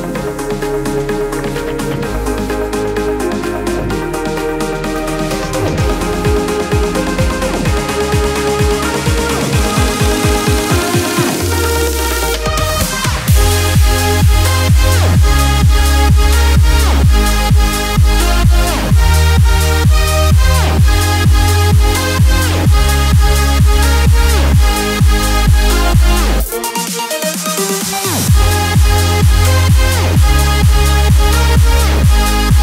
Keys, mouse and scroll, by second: 15.4 shift+Down, 22.1 shift+Down, 22.1 u, 23.2 click, 29.9 click, 30.8 space, 31.1 click, 31.3 space.